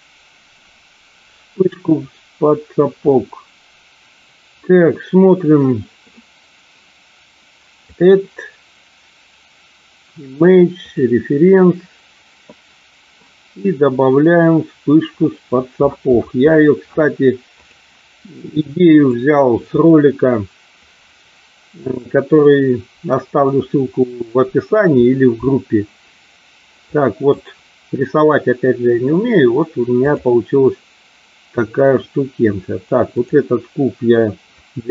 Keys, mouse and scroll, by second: 7.8-11.2 drag, 26.7-27.3 drag, 33.1 click, 34.6 Delete.